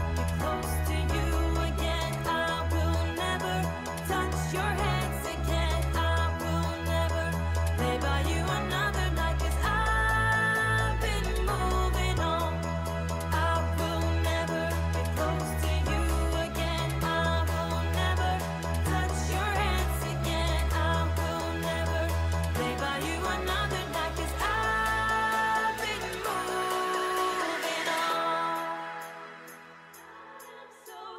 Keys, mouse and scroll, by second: 0.1 ctrl+t, 1.6 shift+click, 5.0 shift+click, 11.1 shift+click, 17.0 Return.